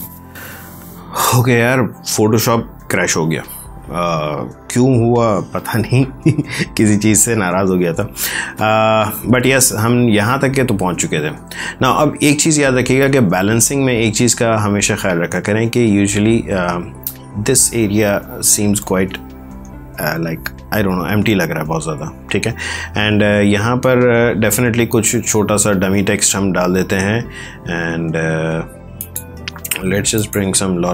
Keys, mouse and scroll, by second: 9.5 alt+Tab, 25.8 alt+Tab, 28.9 alt+click.